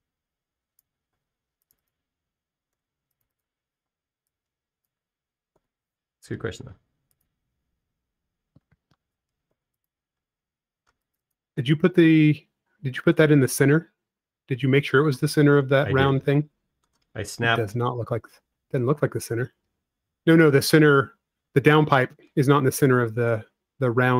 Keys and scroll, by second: 0.7 p, 2.8 space, 4.1 f, 5.2 typing, 6.9 typing, 10.3-11.7 typing, 13.3-14.1 typing.